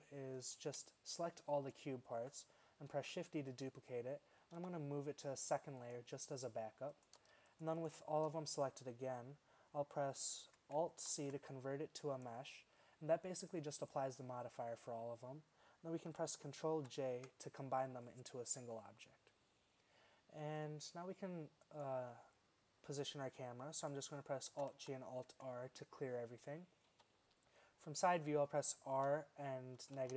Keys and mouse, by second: 3.0 shift+d, 4.6 m, 11.2 alt+super+c, 16.8 ctrl+j, 21.7-23.6 right drag, 24.6 alt+g, 24.8 alt+r, 27.0 KP_3, 29.0 r.